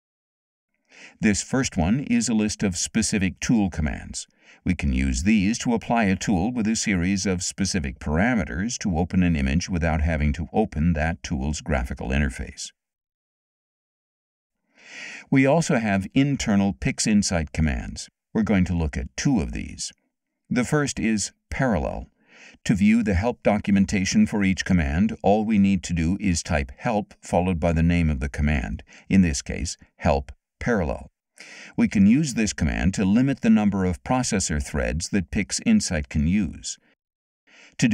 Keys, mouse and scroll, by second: 1.2-4.0 drag, 14.2 middle click, 14.3-15.0 scroll up 6, 15.9-18.9 drag, 22.7 click, 25.4-29.1 typing, 31.1 Return, 34.8 middle click, 34.8 scroll up 2, 35.1 scroll down 2, 35.2-37.0 scroll up 8, 35.8 middle click, 36.4 middle click, 37.1 middle click, 37.2-37.7 scroll up 4, 37.5 middle click.